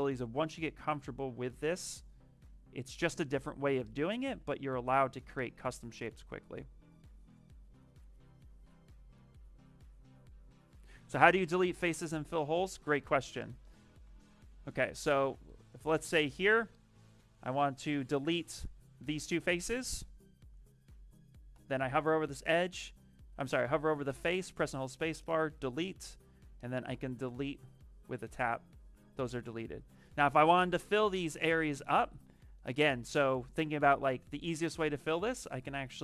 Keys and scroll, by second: 13.7 ctrl+z, 13.9 ctrl+z, 14.3 ctrl+z, 21.4 space, 24.0 space, 31.8 s.